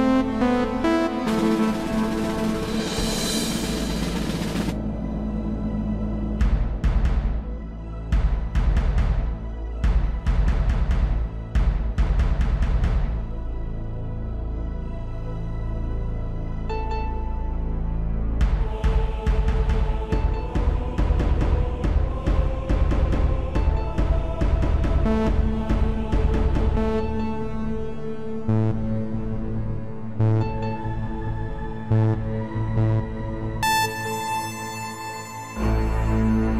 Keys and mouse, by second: 6.6 n, 9.3 click, 11.8 click, 16.4 n, 20.3-23.3 drag, 26.5-29.6 drag, 35.2-36.5 drag.